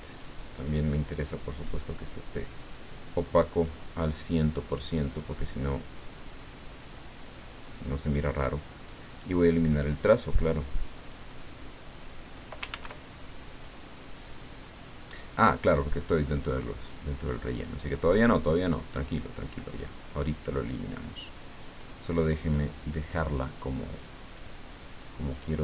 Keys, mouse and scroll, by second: 0.8 click, 3.5 click, 5.1 click, 6.3-8.1 drag, 9.1 click, 10.3 click, 11.0 click, 12.7 ctrl+z, 18.5-21.9 drag, 24.2 click.